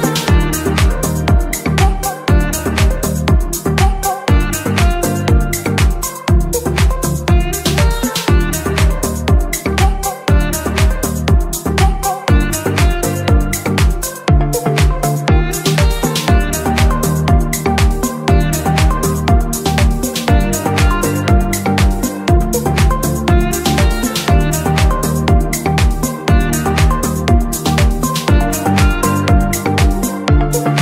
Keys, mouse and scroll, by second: 0.8 click, 11.6-12.0 scroll down 1, 12.0 click, 13.9 KP_3, 15.2 r, 15.6 x, 21.2 click, 25.8 click, 26.4-27.6 scroll down 4, 27.9 click, 28.4-29.4 scroll down 3, 29.4 click, 30.2 click.